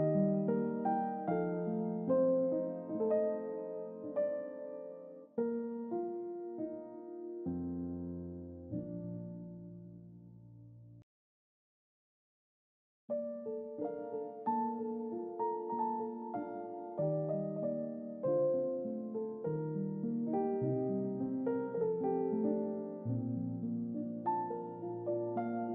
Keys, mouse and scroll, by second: 2.2 click, 2.7 middle click, 3.2-3.6 scroll down 2, 3.6-4.4 middle drag, 5.3 Tab, 5.6 click, 6.0-7.9 middle drag, 9.4 click, 11.0 click, 13.9-15.5 typing, 15.8 Return, 17.8 click, 19.0 click, 19.8 click, 21.2-22.1 typing, 24.5-24.9 typing, 25.0 Return.